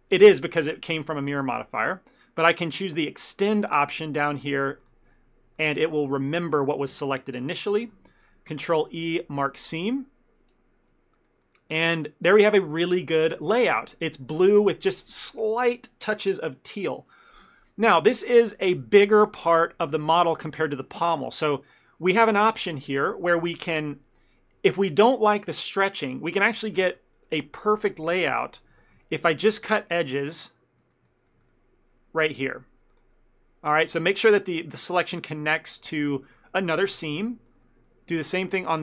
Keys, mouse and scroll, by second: 4.3 click, 4.9 click, 6.3 shift+middle click, 8.9 ctrl+e, 11.3 ctrl+middle click, 11.8 shift+middle click, 13.8 scroll up 3, 14.4 scroll down 1, 18.0 ctrl+middle click, 18.8 Tab, 23.5 Tab, 24.0 ctrl+middle click, 26.5 middle click, 26.9 shift+middle click, 27.1 ctrl+middle click, 28.0 middle click, 28.5 ctrl+middle click, 28.9 shift+middle click, 29.1 ctrl+middle click, 29.8 shift+middle click, 30.5 click, 30.9 ctrl+middle click, 31.2 shift+middle click, 31.5 ctrl+middle click, 33.0 ctrl+click, 34.1 shift+middle click, 34.3 ctrl+middle click, 34.7 shift+middle click, 36.1 shift+click, 37.0 ctrl+middle click, 37.3 middle click, 37.7 ctrl+middle click, 38.3 ctrl+middle click, 38.5 shift+middle click.